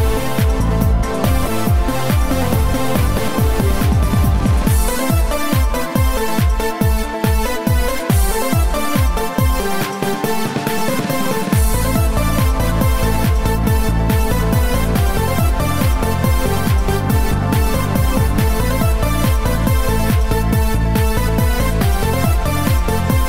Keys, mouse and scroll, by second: 4.2 shift+d, 8.1 click, 9.4 right click, 10.6 Delete.